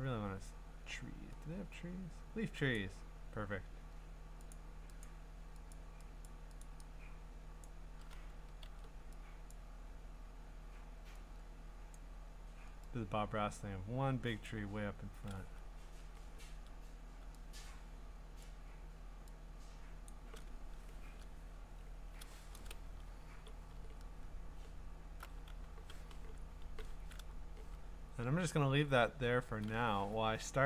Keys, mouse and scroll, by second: 2.8 click, 4.5 click, 5.0 click, 5.7 click, 6.2 click, 6.6 click, 7.6 click, 8.6 ctrl+z, 9.5 click, 11.9 click, 14.4 click, 15.9 ctrl+z, 18.4 click, 20.1 click, 23.3 v, 23.8 middle click, 23.8 scroll, 24.6-26.3 scroll.